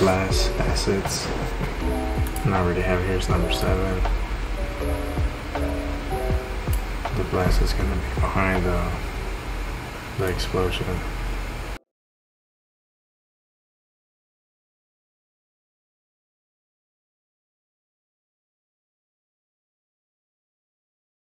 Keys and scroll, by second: 20.7 ctrl+z.